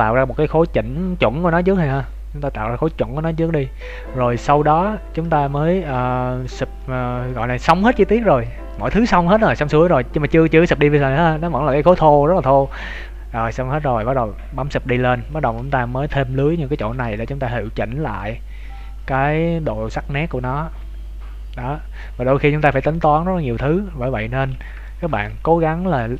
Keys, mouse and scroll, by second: 3.5 scroll up 2, 5.9 shift+middle click, 5.9 scroll up 4, 6.8 middle click, 10.0-10.3 scroll down 4, 15.3-16.7 scroll up 3, 16.7 Tab, 16.7-17.1 scroll up 1, 17.1 shift+middle click, 17.7 middle click, 24.5 scroll down 2, 24.8 shift+middle click, 25.2 middle click.